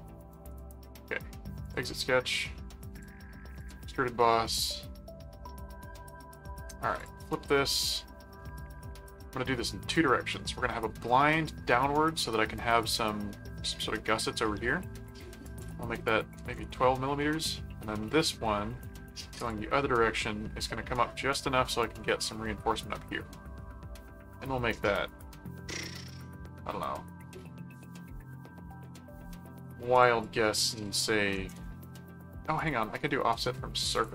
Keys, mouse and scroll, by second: 1.6 click, 2.9 click, 3.6 click, 6.9 click, 7.9 middle click, 11.1 middle click, 13.2 middle click, 15.4 click, 18.0 middle click, 19.4 click, 20.2 middle click, 21.1 middle click, 29.9 click, 32.6 click, 33.9 click.